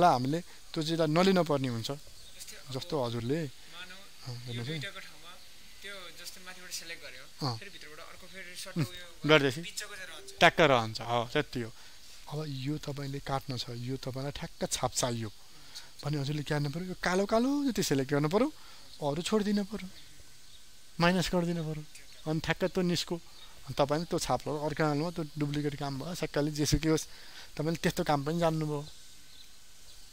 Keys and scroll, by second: 4.8 ctrl+d, 5.8 ctrl+space, 11.9 ctrl+space.